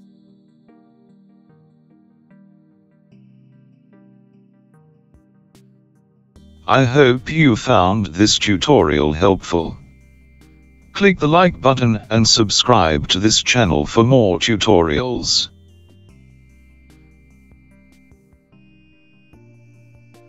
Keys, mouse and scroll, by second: 3.6 space.